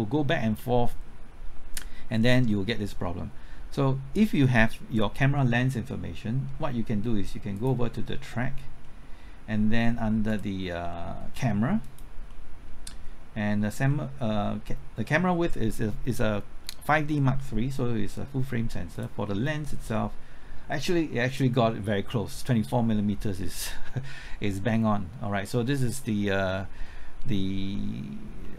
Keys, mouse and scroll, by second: 8.2 middle click, 10.3 click, 10.9 middle click, 11.8 click, 12.3-13.5 middle drag, 18.9 click, 19.3-28.5 middle drag.